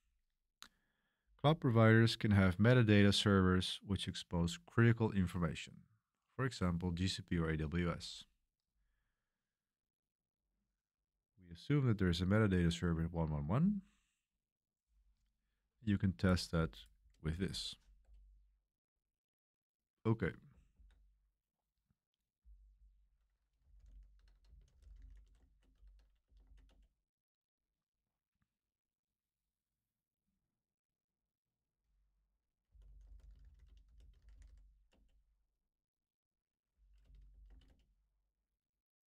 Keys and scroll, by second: 17.1 super+v, 18.0 Return, 20.7 ctrl+c, 23.3-26.7 typing, 28.6 Return, 32.4-34.9 typing, 37.0-38.0 typing.